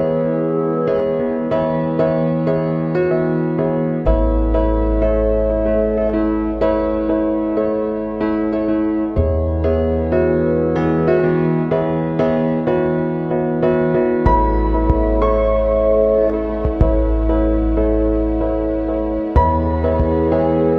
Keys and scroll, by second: 7.0 ctrl+=.